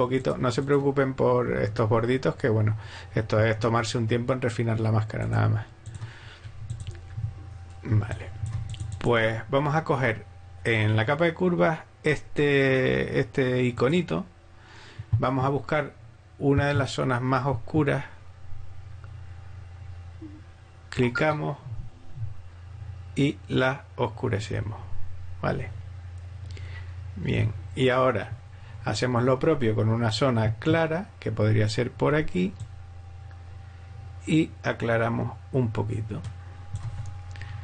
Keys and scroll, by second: 7.9 alt+space.